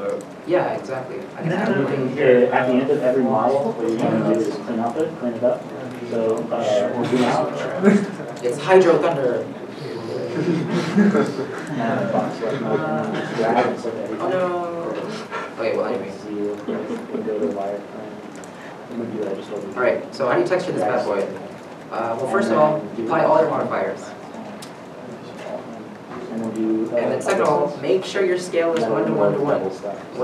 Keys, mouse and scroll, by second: 3.3 scroll, 3.3 s, 5.9 s, 5.9 middle click, 6.3 r, 7.8 right click, 7.9 scroll, 9.4 r, 10.8 right click, 11.1 middle click, 11.6 r, 11.8 r, 13.5 right click, 13.8 middle click, 14.2 r, 14.5 r, 20.1 r, 20.1 middle click, 21.1 shift+middle click, 21.8 Tab, 22.2 Tab, 26.3 shift+middle click.